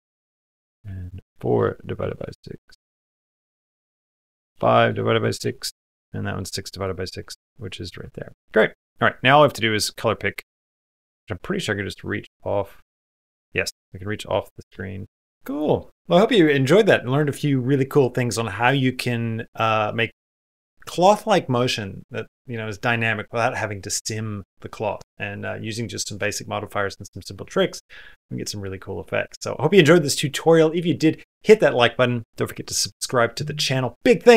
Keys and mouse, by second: 0.1 click, 0.6-2.0 drag, 3.7-5.2 drag, 6.5 click, 9.8 click.